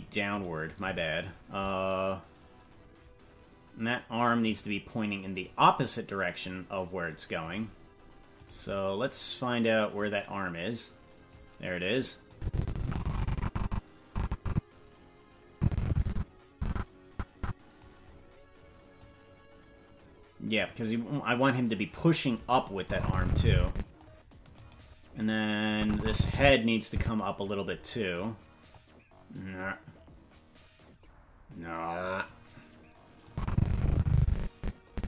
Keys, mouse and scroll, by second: 0.4-2.2 right drag, 4.5-6.4 right drag, 6.4-7.5 drag, 8.6 click, 10.0-11.3 drag, 12.3-17.9 drag, 19.0-20.6 drag, 22.8-24.0 drag, 24.7-25.7 right drag, 25.7-27.5 drag, 28.7-32.3 drag, 33.3-35.0 drag.